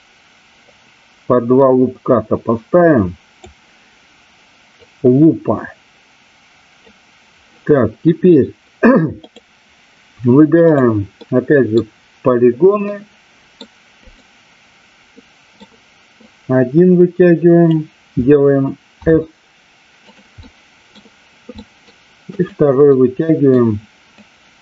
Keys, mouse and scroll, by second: 0.7-3.4 drag, 4.8-6.8 drag, 9.2 click, 11.2 middle click, 12.9 middle click, 13.9 click, 15.2 middle click, 16.2-17.7 drag, 18.9 s, 20.1 click, 20.3 middle click, 21.5 middle click, 22.8 middle click, 24.3-24.6 drag.